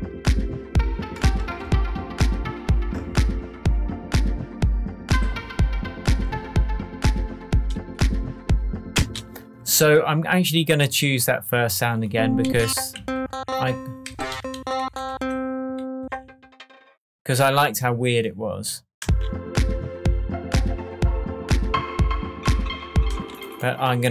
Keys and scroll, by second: 8.9 space, 12.4 Down, 14.3 Up, 19.0 space, 23.1 space.